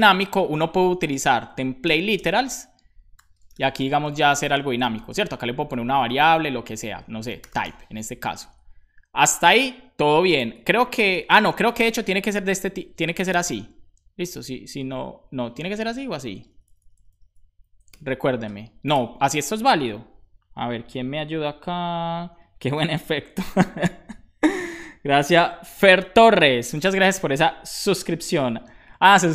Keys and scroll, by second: 0.1 Right, 1.1 Right, 1.8 BackSpace, 1.9 `, 2.1 space, 3.7 Left, 3.9-4.9 typing, 7.1-8.0 typing, 16.3 Left, 16.6 Left, 16.8 Left, 17.0 Left, 17.1 Left, 17.6 Left, 17.9 BackSpace.